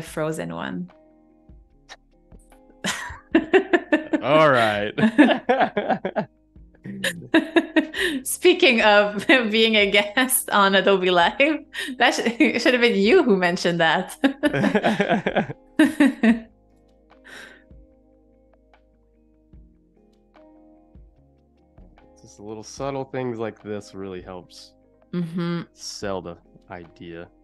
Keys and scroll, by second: 0.8 a, 5.0 shift+b, 7.9 ], 9.6 a, 10.9 shift+b, 11.6 ].